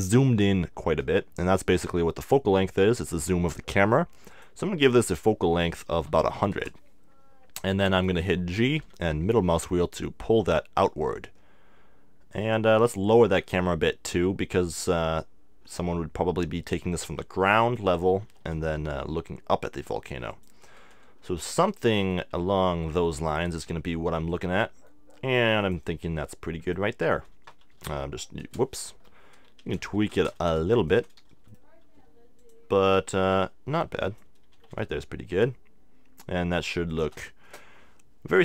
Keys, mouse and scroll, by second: 4.3-6.2 drag, 6.4 0, 8.8 g, 12.5-14.4 drag, 12.8 g, 17.7-19.5 drag, 18.2 r, 20.4-22.2 drag, 21.9 g, 24.4-28.0 drag, 24.7 g, 26.0 g, 29.6 r, 31.0-32.8 drag, 31.3 g, 33.1 g, 34.2-36.0 drag, 34.5 r, 37.0-38.4 drag.